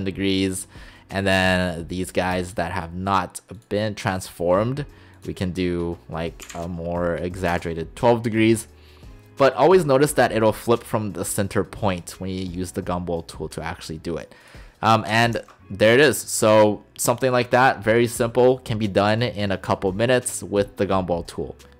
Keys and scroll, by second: 6.5 typing, 7.6 Return.